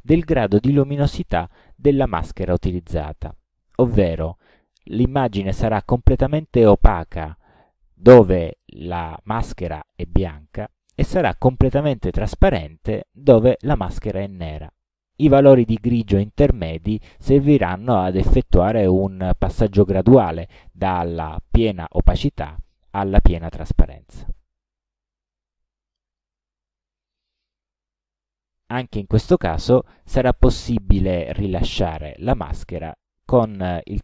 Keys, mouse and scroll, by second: 26.1 click, 28.6 click, 31.0 right click.